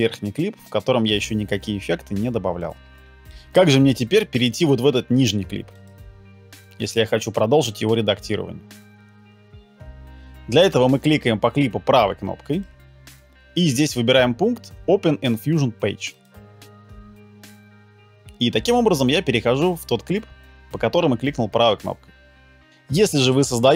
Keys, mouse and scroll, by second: 12.6 right click.